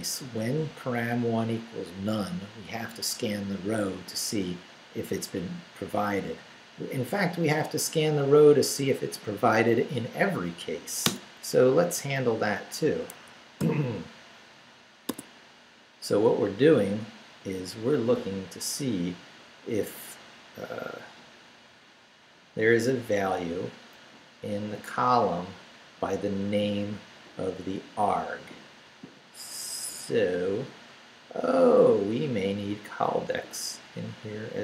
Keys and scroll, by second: 11.1 Return, 11.9 Up, 13.1 Escape, 13.6 o, 15.1 Tab.